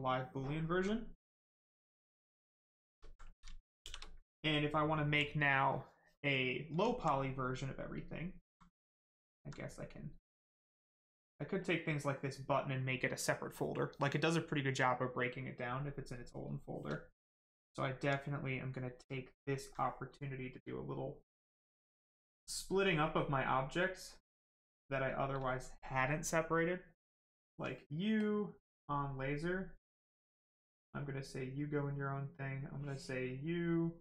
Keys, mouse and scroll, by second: 0.5 alt+right click, 0.7 right click, 2.7 shift+right click, 3.7 shift+f, 4.1 right click, 4.9 alt+right click, 7.7 alt+right click, 9.1 alt+click, 9.7 right click, 11.5 click, 17.1 alt+right click, 18.3 right click, 18.4 right click, 19.2 alt+click, 23.7 click, 24.4 right click, 24.9 shift+right click, 27.2 click, 30.4 click, 32.5 click.